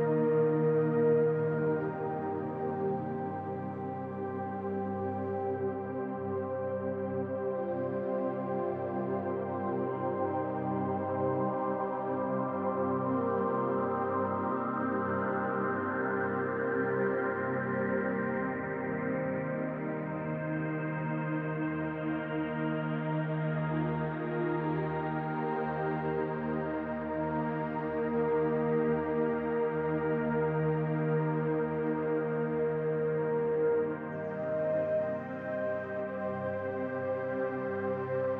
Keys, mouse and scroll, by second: 1.1 c, 7.4 middle click, 9.1 middle click, 10.6 middle click, 10.6 c, 12.1 middle click, 12.7 c, 14.3-15.1 scroll down 3, 14.7 middle click, 20.2 middle click, 20.2 c, 21.2 middle click, 26.0 click, 27.6 click, 32.9 click, 33.8 Tab, 36.7 click, 37.3-38.3 scroll down 21.